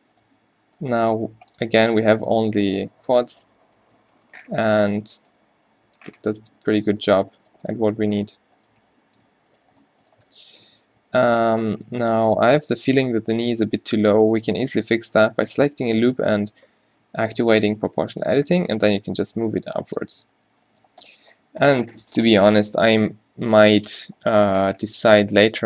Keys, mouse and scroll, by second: 0.6 q, 1.1 g, 1.9 g, 2.3 g, 3.4 Tab, 3.9 Tab, 4.3 Tab, 6.2 Tab, 7.1-9.1 middle drag, 10.8 g, 11.4 Tab, 13.1 Tab, 16.0 o, 17.8 g, 20.2 Tab, 20.6 z, 20.9 z, 25.1 Tab.